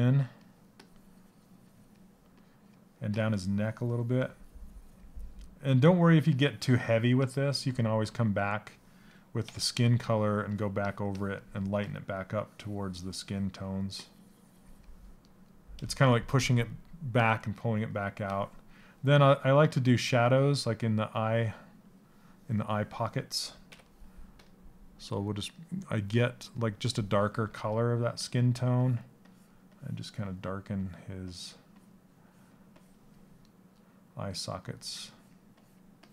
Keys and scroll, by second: 27.0 s.